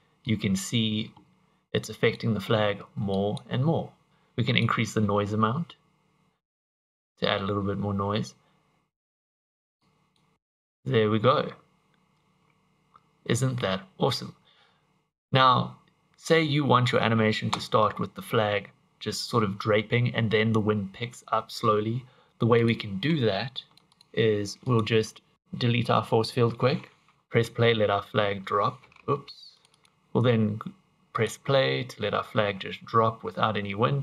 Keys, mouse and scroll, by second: 0.2 click, 1.8 click, 3.2 click, 4.1 click, 9.9 click, 22.6 click, 23.6 click, 24.0 click, 24.7 click, 26.0 Delete, 27.1 click, 29.0 Escape, 29.6 click, 29.7 click, 31.2 click.